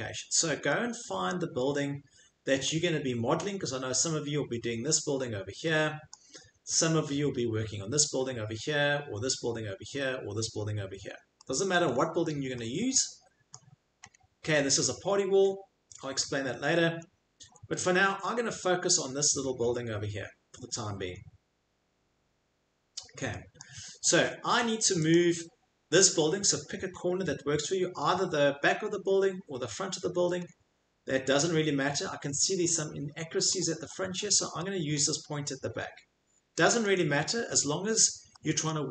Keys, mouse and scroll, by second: 0.0 middle click, 0.1 middle click, 1.2 middle click, 1.7 middle click, 1.7 middle click, 3.3 middle click, 6.0 middle click, 6.0 middle click, 6.1 middle click, 11.7 middle click, 11.9 middle click, 11.9 middle click, 13.5 middle click, 14.0 click, 14.0 click, 14.6 click, 15.5 click, 15.6 click, 15.9 click, 17.0 click, 17.1 click, 23.6 middle click, 23.9 middle click, 23.9 middle click, 25.1 click, 26.4 middle click, 26.8 middle click, 28.6 middle click, 28.9 scroll, 29.6-31.2 scroll, 32.0 scroll, 33.5-34.3 scroll, 34.9-36.2 scroll, 36.5-38.0 scroll, 38.7 scroll.